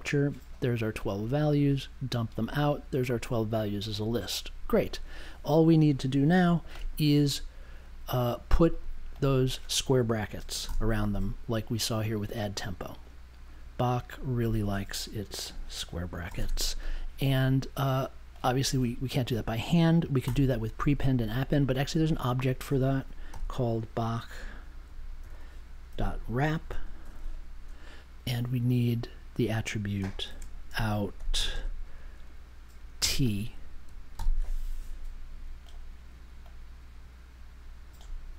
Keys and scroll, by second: 10.5 space, 10.6 ], 15.4 Left, 16.2 [, 16.4 space, 20.2 BackSpace, 23.2 n, 25.3-27.6 typing, 30.2 shift+2, 30.6 o, 31.3 t, 31.5 space, 33.0 t, 34.1 super+j.